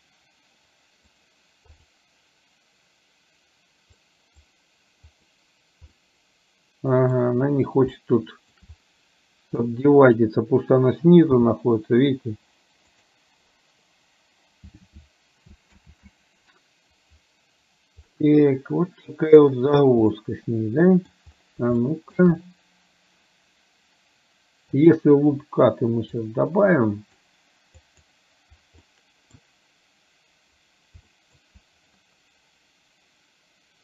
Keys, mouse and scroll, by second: 1.4 right click, 4.1-5.5 right drag, 6.1-7.2 middle drag, 8.0 shift+middle click, 9.9 click, 11.5 g, 15.9 ctrl+z, 18.2-19.5 middle drag, 20.2-21.2 middle drag, 21.9 shift+middle click, 24.9 click, 26.4-27.4 drag, 27.9 click, 29.0 middle click, 31.2 shift+middle click.